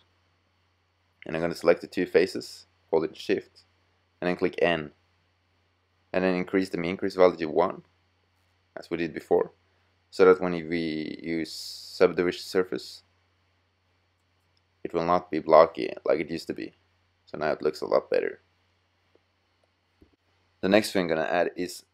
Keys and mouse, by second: 4.6 n, 6.1 click, 10.1 z, 17.1-18.1 middle drag, 18.9-21.9 middle drag.